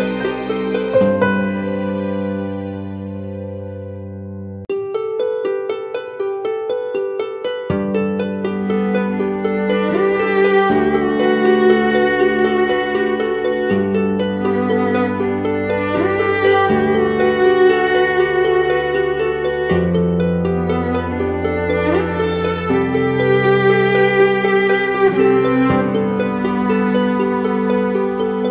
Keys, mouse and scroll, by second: 1.2 ctrl+t, 2.2 ctrl+click, 4.8 Return, 5.1 Down, 7.2 Down, 7.4 Left, 19.2 ctrl+-, 19.6 ctrl+-, 20.4-21.3 alt+scroll up 2, 21.3-22.0 alt+scroll up 1, 22.0-25.0 scroll up 1.